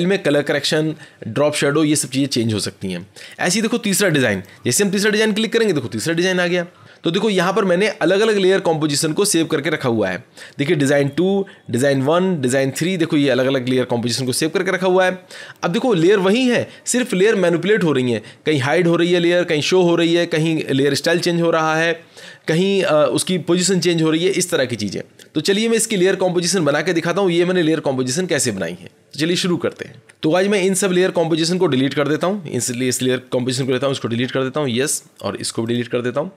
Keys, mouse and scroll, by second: 4.3 click, 10.9 click, 11.9 click, 12.7 click, 14.2 click, 18.8 click, 32.2 click, 33.6 click, 34.9 click, 35.7 click.